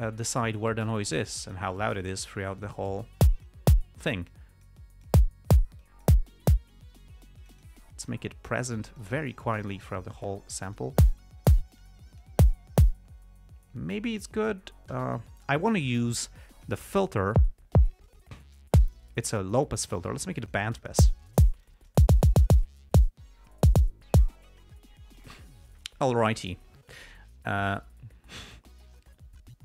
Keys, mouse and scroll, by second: 0.7-2.1 drag, 2.1 click, 4.6-5.6 drag, 6.2 click, 7.8 click, 8.5 click, 9.8-11.3 drag, 12.2 click, 16.9 click, 18.4 click, 20.8 click, 22.0 click.